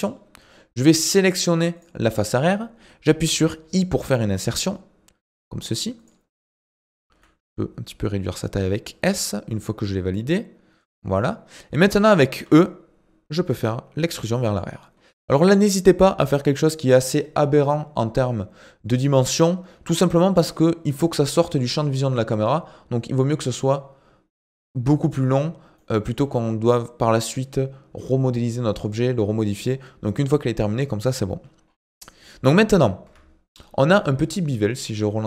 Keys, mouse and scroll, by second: 1.0 click, 1.8 click, 11.2 middle click, 11.7 scroll down 2, 11.9 middle click, 12.4 e, 15.0-18.1 scroll down 1, 25.8-28.9 middle drag, 31.7-32.2 scroll up 5, 32.2 middle click, 33.1 Tab.